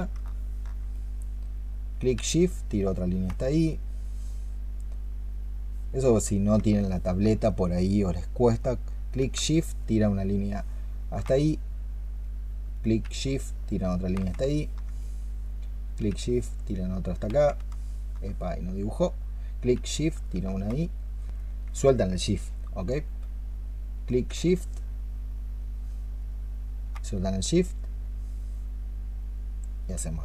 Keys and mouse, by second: 0.1 alt+click, 2.0 alt+click, 6.7 alt+click, 14.3 alt+click, 17.4 alt+click, 19.6 alt+click, 21.7 alt+click, 24.1 alt+click.